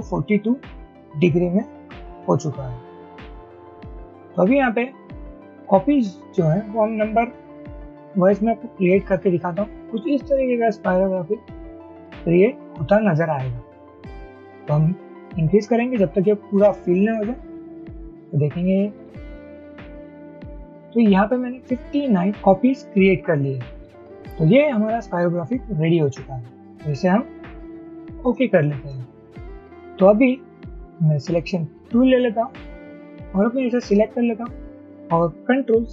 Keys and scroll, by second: 0.0-0.2 typing, 2.0 Tab, 2.7 typing, 10.7 Up, 10.9 Up, 11.0 Up, 11.3 Up, 11.5 Up, 11.7 Up, 12.1 Up, 12.3 Up, 12.5 Up, 12.7 Up, 12.9 Up, 13.1 Up, 13.3 Up, 13.5 Up, 13.7 Up, 14.1 Up, 14.3 Up, 14.4 Up, 14.6 Up, 14.7 Up, 15.2 Up, 15.7 Up, 16.1 Up, 16.9 Up, 17.1 Up, 17.3 Up, 17.5 Up, 17.9 Up, 18.1 Up, 18.3 Up, 18.5 Up, 18.7 Up, 19.3 Up, 19.7 Up.